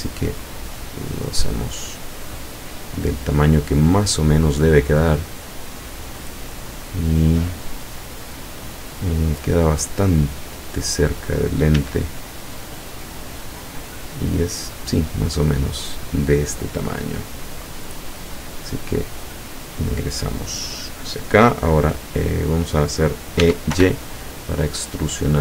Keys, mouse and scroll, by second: 0.5 click, 1.0-1.6 scroll up 1, 2.4-3.7 drag, 4.5-7.3 drag, 7.4-9.2 middle drag, 10.2-11.3 drag, 11.8 s, 14.8 click, 16.5 middle click, 17.7 click, 23.4 e, 23.8 y.